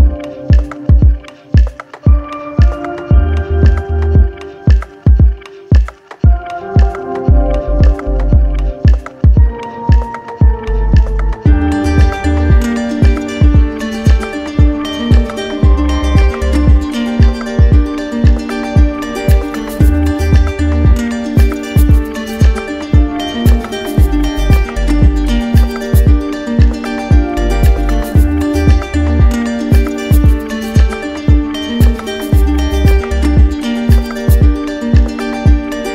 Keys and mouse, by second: 0.7 right click, 3.3 click, 5.9 click, 8.1 shift+click, 9.7 shift+click, 10.4 click, 17.2 click, 17.9 click, 18.9 q, 20.3 z, 21.0 click, 22.4 right click, 24.0 ctrl+d, 25.3 click, 26.6 click, 32.6 shift+click, 33.4 ctrl+z.